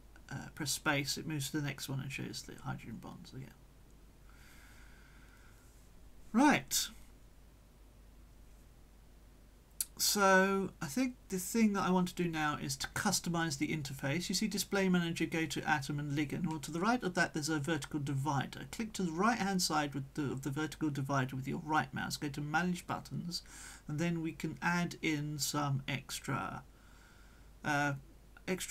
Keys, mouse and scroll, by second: 0.3 middle click, 1.1 click, 1.1 space, 1.2 middle click, 1.6 click, 2.2 space, 2.6-3.4 drag, 3.3 space, 3.7-4.4 drag, 4.2 space, 4.6-5.3 drag, 5.2 space, 5.6 click, 6.0 space, 8.3 click, 9.2 click, 22.3-23.8 right drag, 25.3-26.0 drag, 26.9 click, 28.2-28.7 scroll down 2.